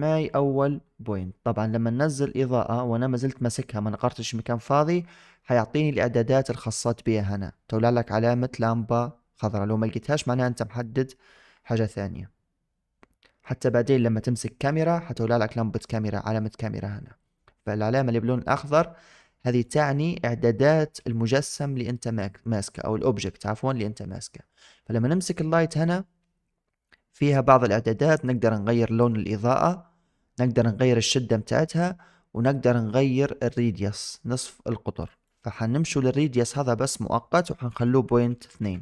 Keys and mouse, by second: 19.5 click, 35.0 click, 36.3-38.5 drag.